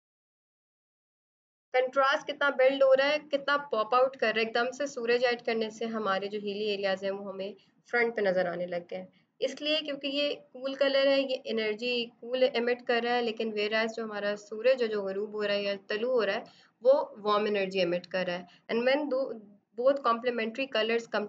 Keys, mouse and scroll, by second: 8.2 b, 9.2 click, 10.4 right click, 10.6 click, 14.0 space, 14.1 click, 14.2 space, 14.3 click, 15.6 b, 16.1 click, 16.3 click, 16.4 click, 16.8 click, 17.9 right click, 18.1 click, 18.9 click.